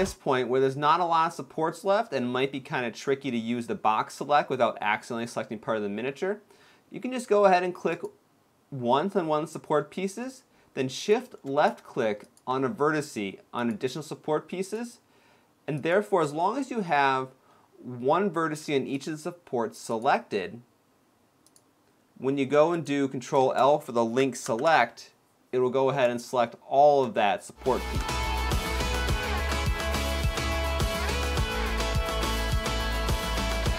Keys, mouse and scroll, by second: 0.2-0.8 scroll down 2, 1.0 middle click, 5.8-7.0 scroll up 2, 7.6 click, 10.7 shift+click, 11.9 shift+click, 13.3 shift+click, 14.3 shift+click, 15.4 shift+click, 18.6 shift+click, 19.5 shift+click, 22.4 shift+click, 23.0 shift+click, 24.2 ctrl+l, 26.0 shift+middle click, 27.7 x, 29.3 click, 29.5 ctrl+l, 29.6 x, 29.9 shift+middle click, 30.1 click, 30.3 ctrl+l, 30.3 ctrl+k, 30.5 x, 30.6 scroll down 4, 30.7 shift+middle click, 30.9 middle click, 31.1-31.6 scroll up 3, 31.4 click, 31.7 shift+click, 31.9 shift+click, 32.4 shift+click, 32.7 ctrl+l, 32.8 x, 33.0 middle click, 33.3 click, 33.7 ctrl+l.